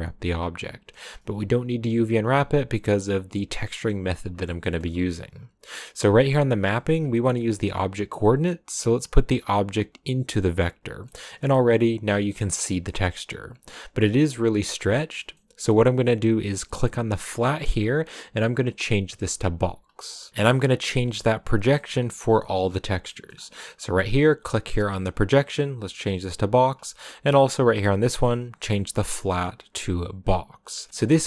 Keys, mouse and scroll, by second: 0.5-2.3 scroll down 1, 2.3-2.7 scroll down 1, 6.0-8.2 drag, 10.8 scroll down 1, 11.0-12.3 middle drag, 12.3-13.4 scroll up 4, 12.6 middle click, 19.3 click, 20.0 middle click, 20.5 click, 26.1-27.1 drag, 27.1 scroll up 1, 27.2 click, 29.8 click, 30.8 scroll down 4, 30.9-31.2 shift+middle drag.